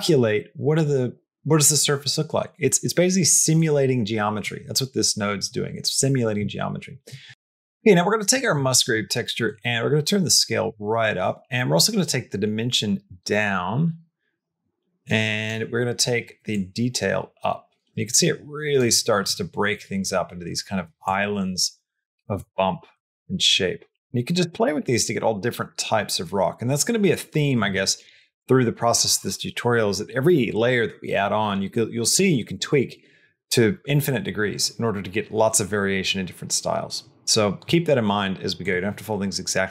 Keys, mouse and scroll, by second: 3.5 click, 8.2 middle click, 9.3-11.0 drag, 11.9-15.3 drag, 16.4-18.6 drag, 21.0-22.2 drag, 22.8-27.5 drag, 38.5-39.7 drag.